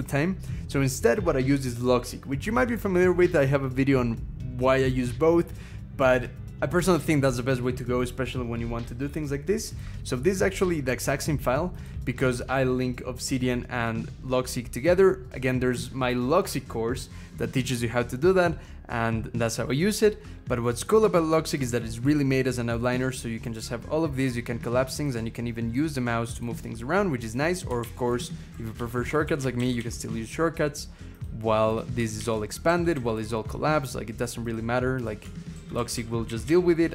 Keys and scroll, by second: 27.6 alt+shift+Up, 27.9 alt+shift+Up, 28.3 alt+shift+Down, 28.6 alt+shift+Down, 29.6 alt+shift+Up, 32.0 alt+shift+Up, 32.4 alt+shift+Down, 32.7 alt+shift+Down, 35.3 alt+shift+Down, 35.6 alt+shift+Down, 35.7 alt+shift+Down, 36.0 alt+shift+Up, 36.2 alt+shift+Up.